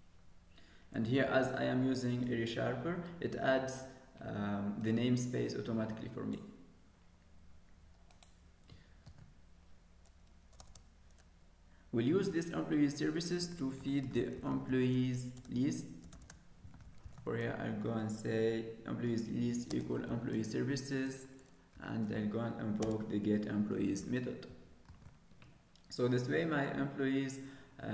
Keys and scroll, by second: 1.2 ctrl+s, 9.0 ctrl+s, 24.9 ctrl+s.